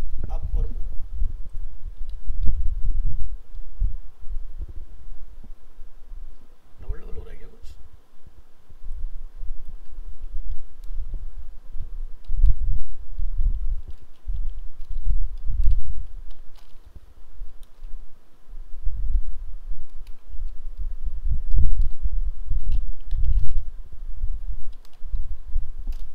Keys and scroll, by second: 18.2 ctrl+v, 18.9 ctrl+Left, 19.7 ctrl+Right.